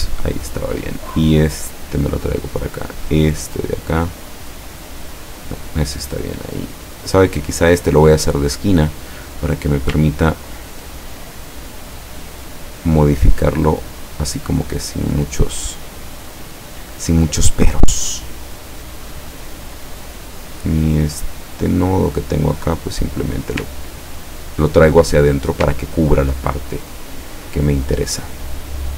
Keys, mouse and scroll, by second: 0.7-2.5 drag, 3.2-5.7 drag, 6.6 click, 7.3 click, 8.7 click, 9.5 scroll up 1, 10.1 ctrl+scroll up 1, 11.8 click, 13.8-16.3 drag, 17.0 click, 17.6-19.1 drag, 21.2 click, 21.8-23.6 drag, 23.8-24.3 ctrl+scroll down 1, 25.0 ctrl+click, 25.6-26.1 ctrl+scroll down 1, 26.7 ctrl+click, 27.6 ctrl+scroll down 1.